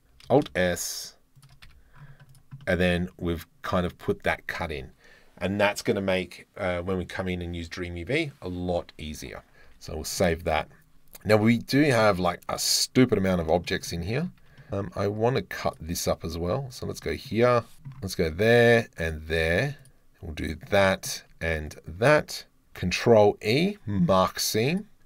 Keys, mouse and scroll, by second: 0.3 alt+s, 1.4 shift+click, 1.7 Tab, 2.3 click, 2.6-3.2 drag, 9.8 ctrl+s, 10.2-10.6 drag, 11.9 click, 12.5 middle click, 13.0 middle click, 13.7 shift+middle drag, 13.9 middle click, 14.4 Tab, 15.1 2, 15.7 alt+click, 16.7 alt+click, 17.0 click, 17.8 KP_7, 19.9 click, 20.6 middle click, 20.8 shift+click, 21.1 shift+middle click, 21.3 alt+shift+middle click, 21.8-23.2 alt+shift+middle drag, 23.0 ctrl+e, 25.0 Tab.